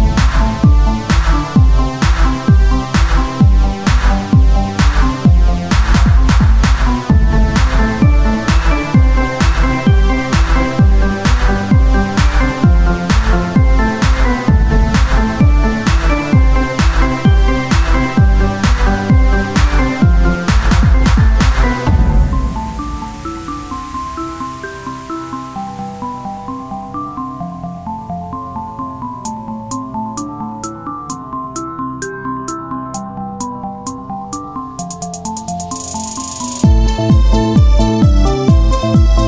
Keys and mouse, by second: 0.5 z, 0.9-4.7 drag, 6.0-7.0 drag, 7.0-11.0 right drag, 9.1-11.0 drag, 11.0 o, 11.5-13.2 right drag, 13.2-14.2 drag, 14.2 KP_3, 14.7-16.0 drag, 14.8 z, 15.1 c, 17.2-19.7 drag, 18.6 right click, 18.8 z, 19.8 right click, 20.4 z, 21.3 z, 21.5-23.4 drag, 23.9-26.5 right drag, 24.8 z, 25.5-30.1 drag, 26.5 right click, 30.5-31.6 drag, 32.3-33.5 drag, 35.6 z.